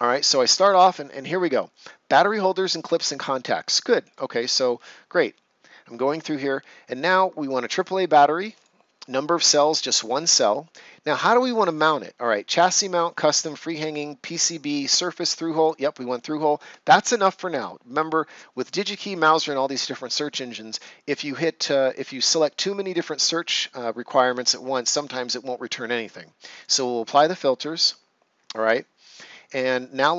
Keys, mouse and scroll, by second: 5.3 click, 7.6 click, 15.5 click, 26.5 click, 28.5 scroll down 1, 29.7 scroll up 1.